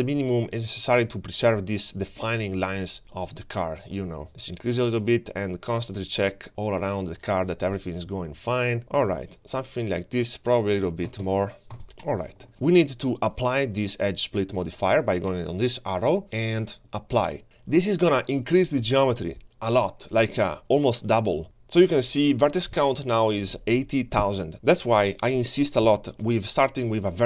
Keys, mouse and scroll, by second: 2.9-6.5 drag, 6.8-7.6 middle drag, 7.8 scroll down 1, 8.1 shift+middle drag, 8.6-8.9 scroll down 2, 8.9 shift+middle drag, 9.4-10.1 middle drag, 9.4-9.9 scroll down 1, 10.3-11.0 scroll up 1, 11.0 scroll up 2, 11.0 click, 11.4 2, 12.5 shift+middle click, 12.5 scroll down 2, 12.7 scroll up 1, 12.8-13.5 scroll down 2, 13.0-13.5 scroll up 1, 13.5-13.8 scroll down 2, 15.3-18.9 drag, 15.3-16.1 scroll down 1, 19.5-21.4 drag, 21.4 shift+middle click, 21.4-21.8 shift+scroll down 1, 21.4 g.